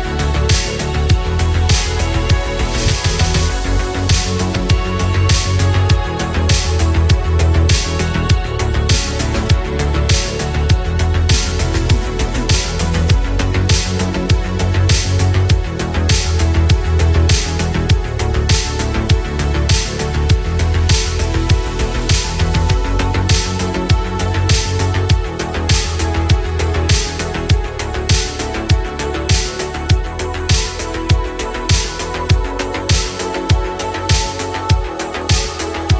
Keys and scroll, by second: 5.8 ctrl+z.